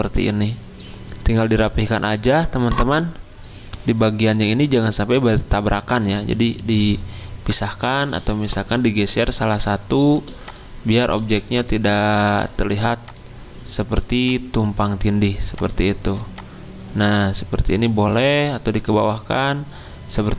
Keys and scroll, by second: 0.2 f, 7.7 Escape.